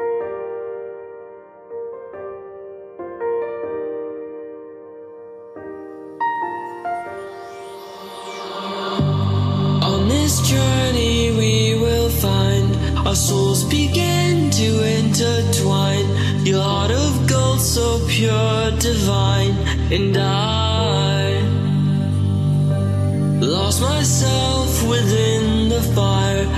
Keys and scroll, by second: 2.4 Delete, 16.1-17.0 typing, 19.2 g, 21.8-22.7 typing.